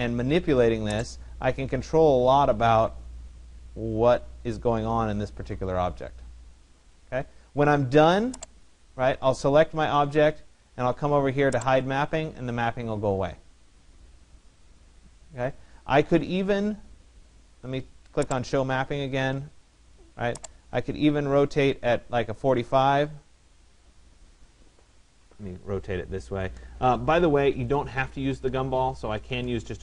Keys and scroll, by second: 24.6 ctrl+z, 28.6 Return.